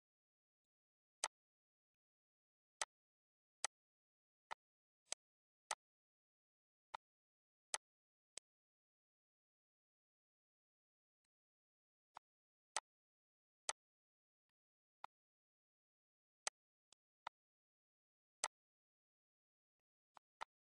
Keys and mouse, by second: 0.4 shift+click, 1.0 click, 1.7 click, 2.6 shift+click, 3.4 click, 4.3 click, 4.9 click, 5.4 click, 6.7 click, 7.4 click, 8.1 click, 11.0 click, 11.9 shift+click, 12.5 click, 13.5 click, 14.2 click, 14.8 click, 16.0 Delete, 16.2 click, 16.3 Delete, 16.7 click, 16.7 Delete, 17.0 click, 18.2 click, 19.5 click.